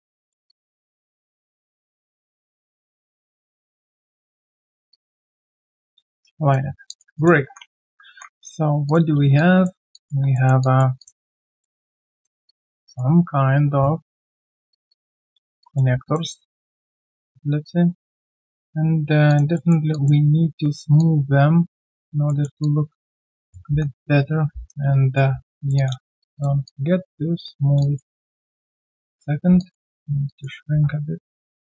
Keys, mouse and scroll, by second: 0.0 alt+middle click, 0.5 alt+click, 2.0 right click, 5.5 middle click, 5.6-6.0 typing, 6.2 right click, 6.6 scroll down 1, 6.9 alt+click, 7.1 alt+click, 7.4 alt+click, 8.0 ctrl+1, 9.3 alt+click, 10.3 alt+middle click, 10.6 alt+click, 11.4 alt+middle click, 11.7 alt+click, 12.4 alt+click, 12.8 alt+right click, 14.7 shift+click, 14.9 shift+double click, 15.6 alt+click, 16.0 shift+click, 19.3 alt+click, 19.5 alt+middle click, 19.9 alt+click, 21.0 alt+click, 22.3 alt+middle click, 22.6 alt+click, 23.6-24.5 typing, 24.9 right click, 25.7 double click, 26.2 shift+click, 26.3 shift+double click, 26.6 alt+click, 27.7 alt+click, 28.3 right click, 29.6 alt+click, 29.9 alt+middle click.